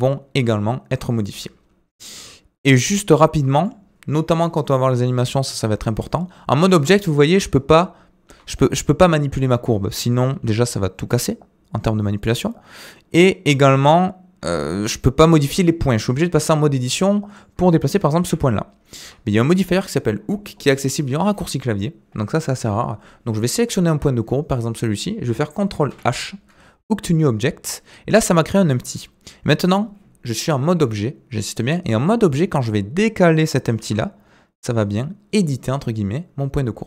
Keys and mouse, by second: 1.1 space, 2.1 click, 7.3 g, 16.4 Tab, 17.3 click, 18.2 g, 25.9 ctrl+h, 28.7 Tab, 29.6 click, 33.8 g.